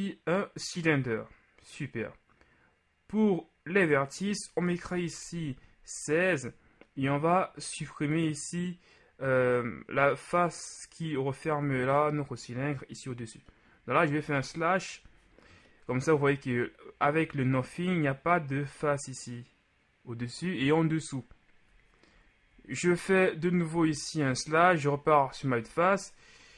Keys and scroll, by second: 4.9 KP_6, 12.6 KP_Multiply, 14.2 KP_Divide, 22.6 KP_Divide, 23.8 KP_1.